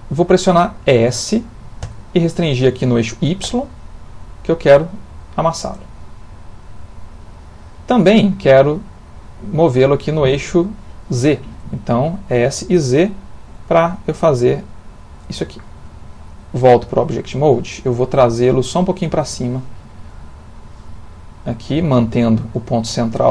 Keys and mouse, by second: 0.6 middle click, 1.8 s, 7.3 middle click, 10.7 middle click, 12.4 s, 15.8 Tab, 19.8 click, 20.9 click, 22.5 middle click.